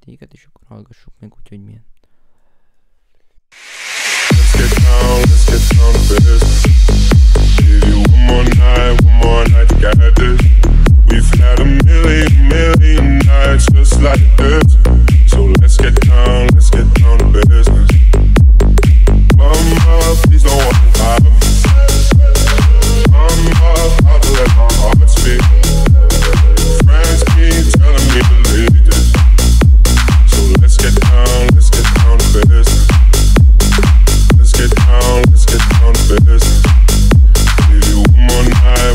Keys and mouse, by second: 11.3 F1, 11.3 right click.